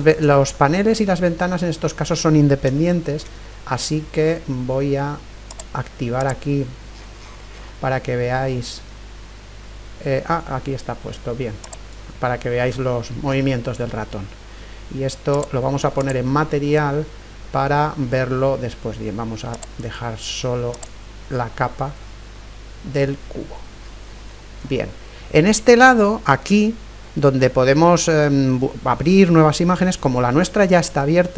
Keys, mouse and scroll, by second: 2.4 middle click, 2.9-5.4 middle drag, 5.5-8.0 drag, 6.9-7.8 scroll down 1, 7.8 scroll up 1, 8.0-9.5 middle drag, 9.5-10.1 scroll up 1, 11.6-13.6 drag, 15.3-17.3 drag, 17.1-18.6 middle drag, 19.5-22.6 drag, 21.6-31.3 middle drag.